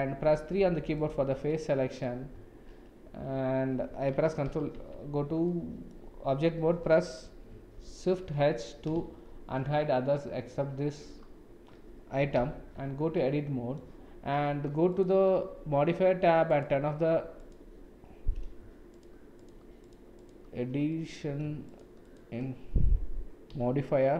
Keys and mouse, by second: 0.2 3, 1.5 middle click, 4.5 ctrl+l, 4.8 Tab, 5.5-5.9 middle drag, 7.7 shift+h, 9.3 shift+z, 12.3 KP_Decimal, 12.8 Tab, 13.1 middle click, 16.5 click, 17.4 click, 18.9 shift+click, 19.3 shift+click, 19.8 shift+click, 20.1 shift+click, 20.9 middle click, 21.6 shift+click, 23.5 x.